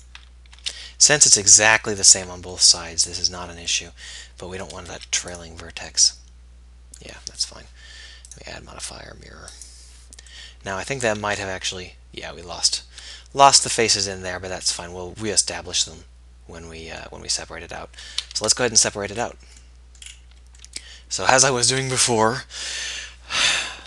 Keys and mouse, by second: 0.7 x, 4.9 x, 11.4 z, 18.3 z, 22.2 KP_1, 22.4 KP_3.